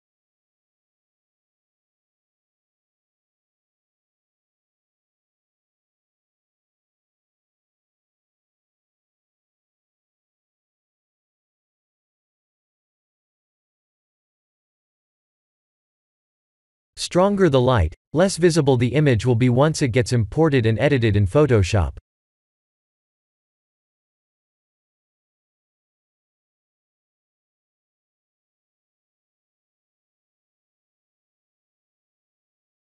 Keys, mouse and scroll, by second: 1.5 s, 8.2 click, 10.9 click, 12.2 click, 17.6 click, 23.5 click, 25.4 click, 26.5 click, 28.3 click.